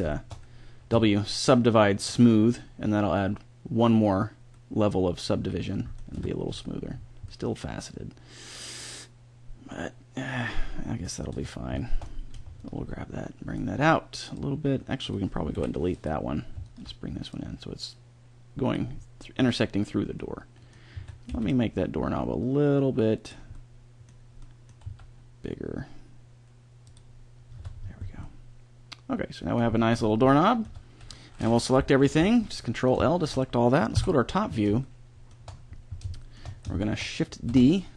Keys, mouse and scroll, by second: 0.1 click, 0.9 w, 4.5-5.6 middle drag, 6.1 Tab, 11.3 Tab, 11.7-14.3 middle drag, 14.3-15.5 drag, 15.5 Delete, 17.3 click, 18.9 scroll up 1, 20.9 a, 21.2 b, 22.0 click, 24.8 s, 25.2-26.2 drag, 27.6 Tab, 30.6 Tab, 32.0 ctrl+l, 33.9 KP_7, 37.6 shift+d.